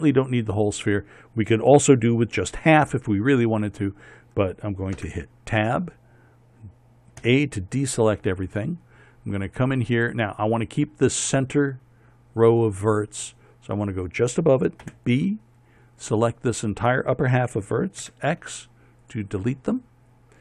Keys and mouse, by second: 5.7 Tab, 7.9 a, 15.5 b, 18.7 x.